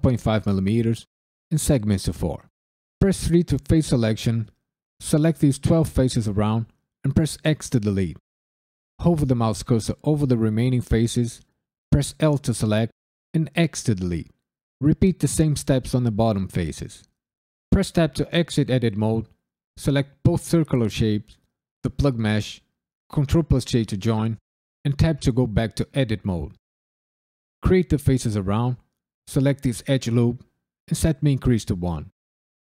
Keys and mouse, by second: 2.9 3, 3.7 click, 4.4 ctrl+click, 4.9 ctrl+click, 5.6 ctrl+click, 7.4 x, 12.1 l, 13.5 x, 14.5 click, 14.9 ctrl+click, 15.3 ctrl+click, 15.7 ctrl+click, 15.9 x, 16.7 l, 16.7 x, 17.7 Tab, 18.4 click, 19.6 shift+click, 21.8 shift+click, 23.1 ctrl+j, 24.8 Tab, 25.2 click, 25.3 l, 25.6 KP_Decimal, 26.0 1, 26.9 shift+click, 27.0 shift+click, 27.3 f, 27.5 click, 27.7 shift+click, 27.9-28.7 f, 29.2 alt+click, 30.2 shift+e, 30.9 KP_1, 31.5 KP_Enter, 31.9 Tab, 32.0 KP_Decimal, 32.5 alt+Tab, 32.6 alt+click.